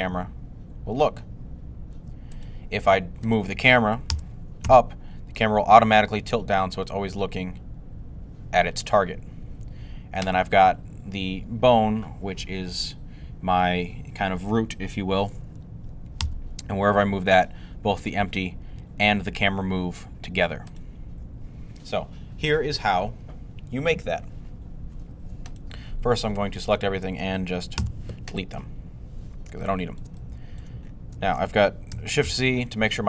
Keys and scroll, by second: 3.9 g, 4.5 z, 6.8 2, 16.0 g, 27.6 x, 32.1 c.